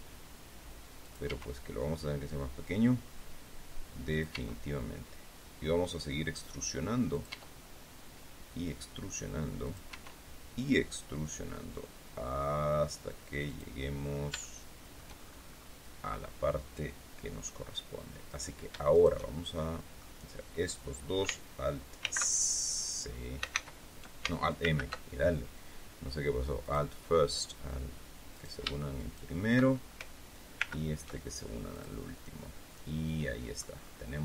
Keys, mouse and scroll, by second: 0.9 click, 1.1 e, 4.0 click, 4.2 e, 7.0 click, 7.2 e, 9.5 click, 9.8 e, 13.4 click, 13.9 scroll up 1, 14.3 shift+middle click, 15.2-15.7 shift+scroll up 1, 18.2 right click, 18.8 shift+right click, 19.2 shift+middle click, 21.9 alt+c, 23.4 alt+c, 24.5 alt+m, 26.5 click, 28.2 right click, 28.9 shift+right click, 30.5 alt+m, 31.6 click, 32.3-32.6 scroll down 1, 32.6-33.7 middle drag, 34.1 scroll down 1.